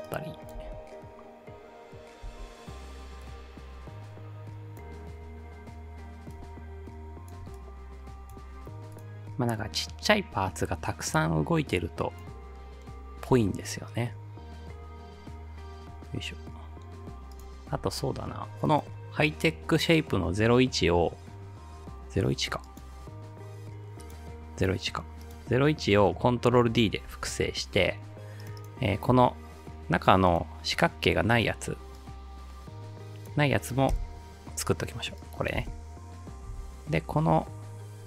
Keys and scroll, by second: 0.6 space, 2.3 space, 27.1 ctrl+d, 33.9 Delete, 35.6 space, 36.5 space.